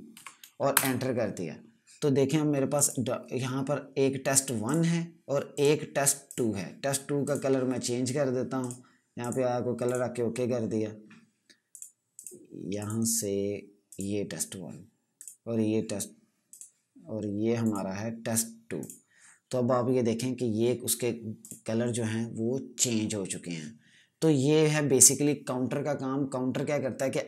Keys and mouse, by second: 0.0-0.1 typing, 0.6 Return, 2.6 click, 21.3 click.